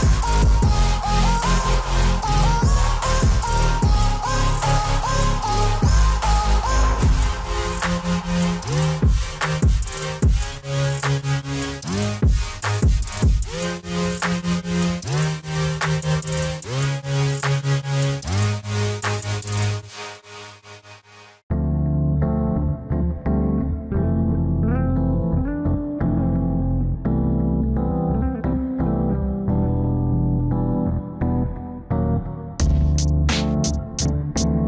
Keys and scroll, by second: 6.3 alt+w, 7.7 F4, 21.3 alt+x.